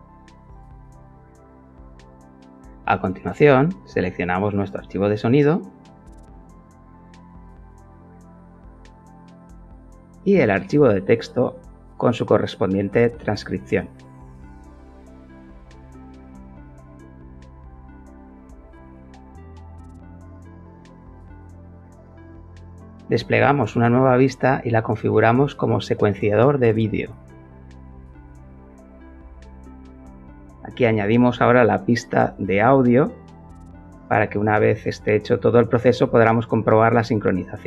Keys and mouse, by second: 0.2 click, 3.8 click, 6.1 click, 6.7 click, 6.9 click, 8.0 click, 9.2 click, 11.6 click, 13.6 click, 13.8 click, 14.8 click, 16.8 click, 23.6-25.4 drag, 26.7 click, 29.0 click, 32.4 shift+a, 34.3 click, 37.5 click.